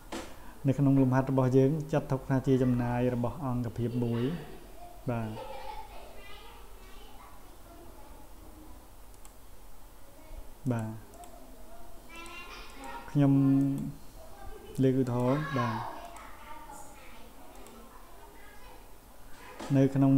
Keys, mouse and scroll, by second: 4.1-4.6 scroll down 1, 9.1 right click, 10.6 click, 11.1 click, 12.1 click, 12.7 click, 13.6 click, 15.1 click, 16.0 click, 17.5 click, 18.4 scroll down 1, 19.0 scroll down 1, 19.6 scroll down 1.